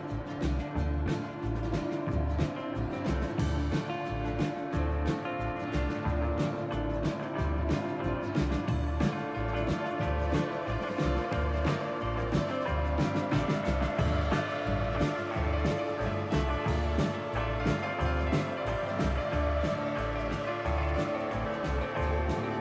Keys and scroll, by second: 1.2 KP_Divide, 4.3 Tab, 10.6 Tab, 14.4 KP_Divide.